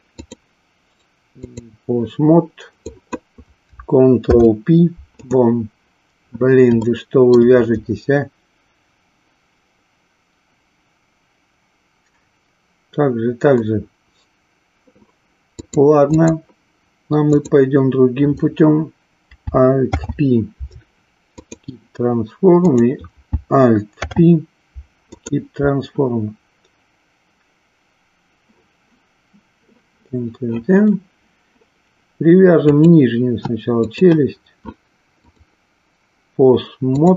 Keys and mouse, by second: 0.1-1.8 drag, 2.9-3.3 drag, 4.2 ctrl+p, 6.9 shift+middle click, 15.6 click, 17.3 click, 19.7 alt+p, 22.6 click, 23.9 alt+p, 32.8 click, 33.8 shift+click, 35.1-37.1 drag.